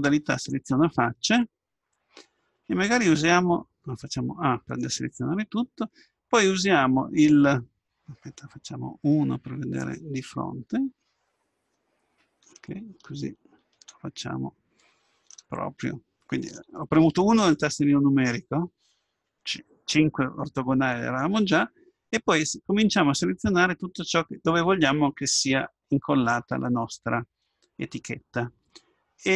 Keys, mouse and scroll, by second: 0.5-2.5 drag, 4.4 a, 9.2 KP_1, 10.5 middle click, 12.7-14.6 middle drag, 14.6-15.6 scroll up 1, 15.6-17.4 middle drag.